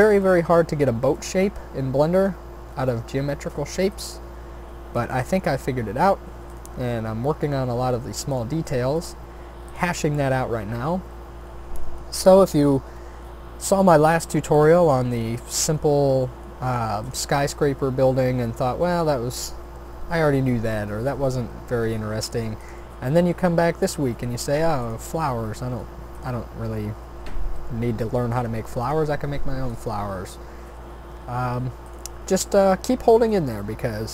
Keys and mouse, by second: 0.2 r, 2.6 e, 4.2 s, 5.2 e, 6.9 e, 8.5 s, 11.1 e, 12.9 s, 14.7 g, 15.8 e, 17.4 s, 20.1 click, 21.9 shift+d, 22.6 click, 23.4 e, 25.0 s, 27.1 e, 29.0 s, 30.2 e, 32.3 s, 33.5 g.